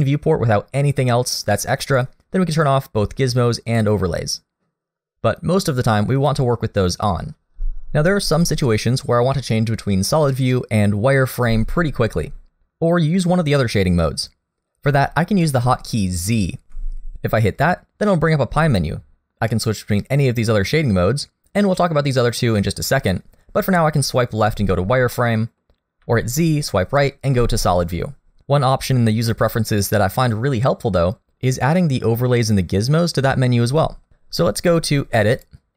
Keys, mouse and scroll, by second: 3.7 click, 6.3 click, 16.7 z, 25.1 middle click, 26.0 z, 35.3 click.